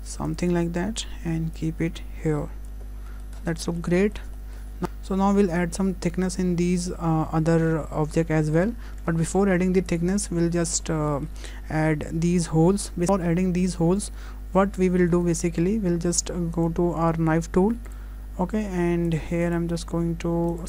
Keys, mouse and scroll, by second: 0.9 Tab, 1.6 click, 2.9-3.4 scroll down 3, 3.1-3.4 scroll up 1, 3.4 middle click, 3.4-3.9 scroll down 3, 3.7 shift+middle click, 4.0 middle click, 4.4 shift+middle click, 4.7 scroll up 1, 4.8 ctrl+z, 4.8 Tab, 4.8 middle click, 4.8-5.1 scroll down 2, 6.7 middle click, 8.6 scroll up 1, 9.4-9.7 scroll up 1, 9.4 `, 10.2 scroll up 2, 10.6 shift+middle click, 10.9 scroll up 1.